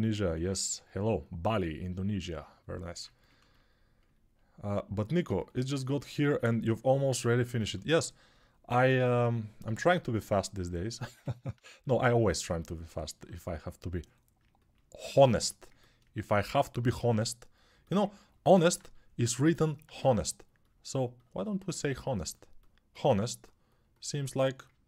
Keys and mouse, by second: 21.6 alt+right click.